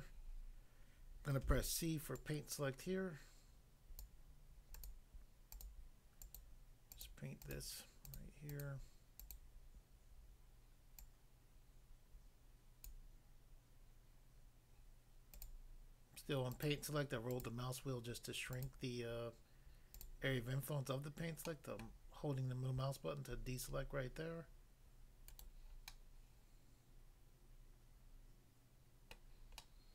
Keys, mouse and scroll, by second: 1.4 c, 2.1 click, 4.1 click, 4.8 click, 4.9 click, 5.5 click, 5.6 click, 6.3 click, 6.4 click, 6.9 click, 7.0 click, 7.4 click, 8.0 click, 8.5 click, 9.2 click, 11.0 click, 12.8 click, 14.3 scroll up 1, 15.4 click, 16.6 click, 17.3 click, 18.6 click, 18.7 click, 19.9 click, 20.0 click, 21.5 middle click, 21.8 middle click, 25.3 right click, 25.4 right click, 25.9 middle click, 29.1 middle click, 29.6 middle click.